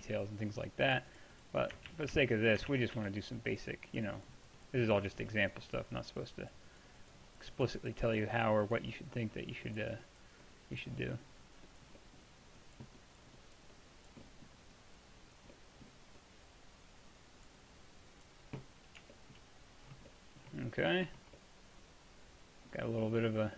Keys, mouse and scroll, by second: 2.0 ctrl+z, 2.2 ctrl+z, 2.8 ctrl+z, 3.0 f, 10.2-12.0 drag, 12.0 middle click, 12.2-14.3 drag, 14.3-15.6 middle drag, 15.6-18.2 drag, 19.4-20.6 middle drag, 21.4-22.4 middle drag.